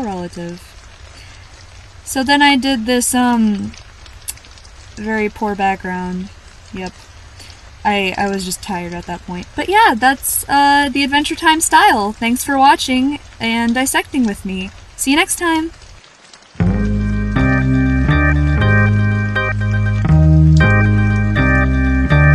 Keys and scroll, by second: 3.2 scroll up 1, 3.3 scroll down 1, 4.8 scroll down 1, 5.3 scroll down 1, 9.0 scroll up 1, 9.2-9.6 scroll down 1.